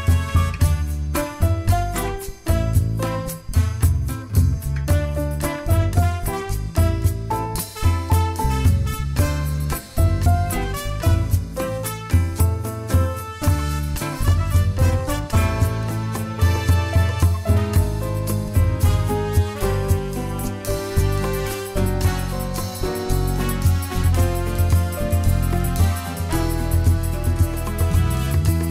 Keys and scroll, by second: 0.5 ctrl+shift+f, 20.9 Delete, 24.4 ctrl+z, 27.6 ctrl+z.